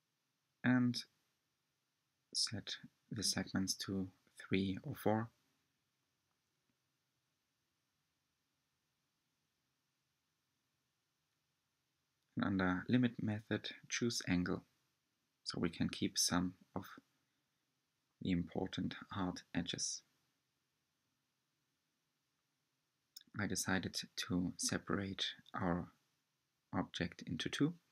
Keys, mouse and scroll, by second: 0.0-2.7 middle drag, 2.7-4.2 drag, 6.7 click, 7.6 click, 9.1 click, 9.9 click, 10.4-10.7 scroll down 1, 10.7-13.6 middle drag, 13.6 click, 14.4-14.8 scroll up 4, 14.9-16.3 shift+middle drag, 16.3 Tab, 18.2 3, 20.3 alt+click, 21.3 alt+shift+click, 21.9 alt+shift+click, 22.3 alt+shift+Left, 22.3 click, 23.0 alt+shift+Left, 23.4 alt+shift+click, 23.9 alt+shift+click, 24.5 scroll down 1, 24.9-27.9 middle drag.